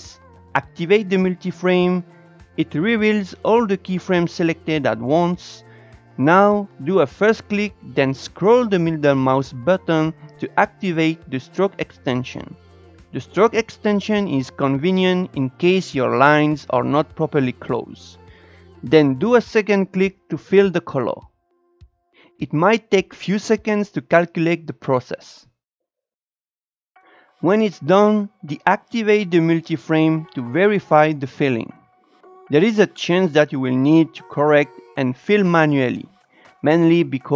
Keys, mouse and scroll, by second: 0.8 click, 3.1-4.0 drag, 5.6 Tab, 6.5-9.5 drag, 29.1 click, 29.7-30.7 drag, 32.0-32.5 Down, 32.6 Up, 33.3 scroll up 2, 33.6 click, 33.9 Up, 34.8 ctrl+z, 35.0 shift+middle click, 35.1 scroll up 2, 35.3 drag, 36.1 scroll down 2, 36.5 Down, 36.6 Up, 36.7 click, 36.8 Up, 37.2 click, 37.3 Up.